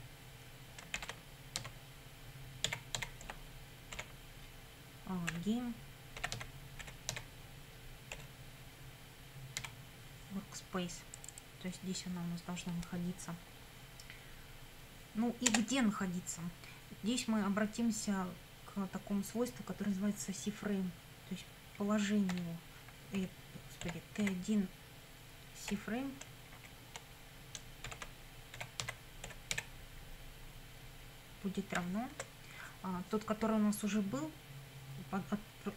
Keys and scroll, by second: 1.0-3.9 typing, 5.3-8.1 typing, 9.6 w, 15.5 Return, 22.3 p, 23.2 BackSpace, 23.8 t, 24.2 1, 25.7 ., 26.6 shift+c, 27.9-30.1 typing, 31.8 =, 32.1 space.